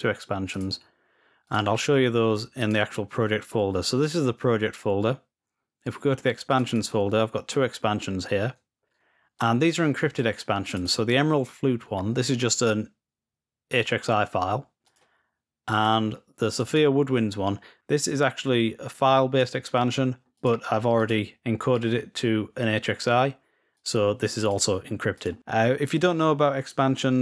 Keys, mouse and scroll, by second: 0.4 click, 1.3-2.0 drag, 2.5 click, 6.2-7.1 drag, 9.1-11.5 drag, 12.2-12.8 drag, 14.7-15.5 drag, 15.6-16.2 drag, 16.4 click, 16.5 click, 19.2 click, 20.1-21.5 drag, 23.5-24.8 drag, 24.9 click.